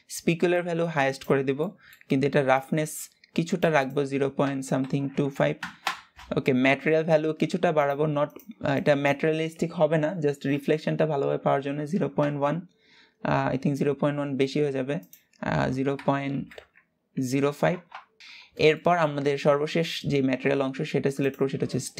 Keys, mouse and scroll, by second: 0.3-1.3 drag, 1.3 middle click, 2.2-6.5 drag, 7.5-11.9 drag, 14.7-17.7 drag, 18.2 ctrl+s, 18.5-19.2 shift+middle drag, 19.2-20.2 scroll up 1, 20.2-20.9 scroll up 1, 20.9 click.